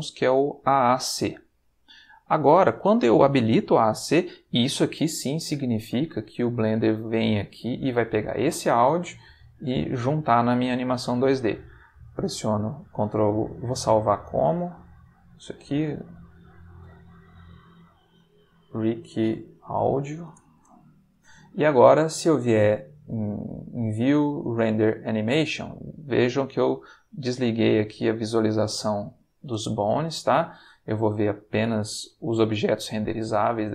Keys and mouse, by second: 1.3 click, 2.4 middle click, 6.5 click, 9.7 click, 14.3 click, 15.1 click, 17.8 click, 18.2 click, 19.0-20.3 typing, 23.9 click, 26.4 click, 27.2 click, 27.7 click, 28.2 click.